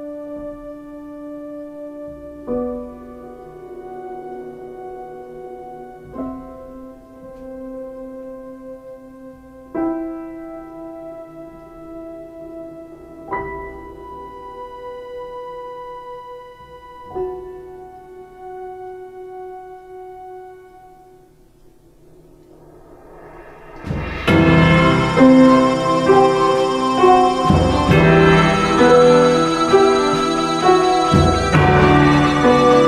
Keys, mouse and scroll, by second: 0.8 ctrl+z, 2.5 ctrl+space, 19.1 space, 20.1 x.